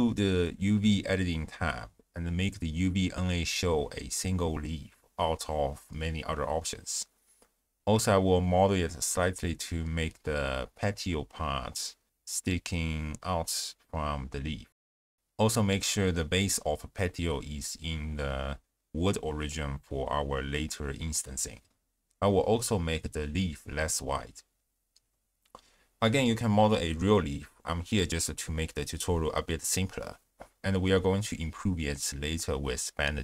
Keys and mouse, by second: 0.0 Tab, 0.6 Tab, 0.9 a, 1.3 s, 4.3 click, 4.8 Tab, 5.2-5.6 drag, 5.7 Tab, 6.4 ctrl+r, 7.3 click, 9.3 click, 9.7 click, 10.5 3, 10.6 click, 10.9 g, 11.1 z, 12.1 click, 12.9 a, 13.7 click, 14.1 g, 14.4 y, 16.9 click, 17.3 Tab, 17.8-18.1 shift+drag, 18.4-18.7 drag, 19.3-19.7 drag, 20.8-21.7 drag, 22.6 ctrl+alt+shift+q, 23.0-23.4 drag, 23.7 Tab, 23.9 s, 24.1 x, 24.8 click, 24.9 middle click, 25.1 Tab, 25.5-27.8 middle drag, 27.8-28.6 drag, 28.6-33.2 middle drag.